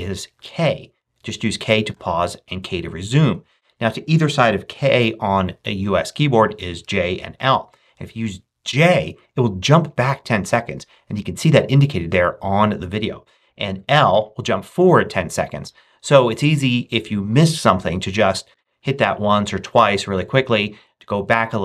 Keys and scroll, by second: 0.3 k, 1.8 k, 8.6 j, 11.1 j, 14.0 l, 15.5 l, 18.4 j.